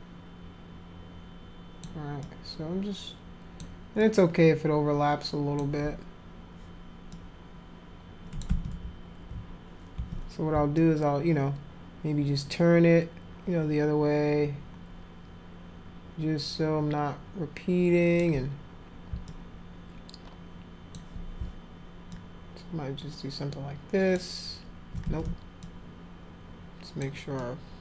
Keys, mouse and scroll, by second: 2.2-3.6 alt+drag, 4.0-5.6 alt+drag, 7.1-8.4 drag, 8.5 ctrl+z, 10.0 ctrl+z, 10.7-18.2 alt+drag, 19.3-21.0 alt+drag, 22.1-24.2 alt+drag, 25.0 ctrl+z, 25.3 alt+click, 25.6-27.0 alt+drag, 27.4-27.8 alt+drag.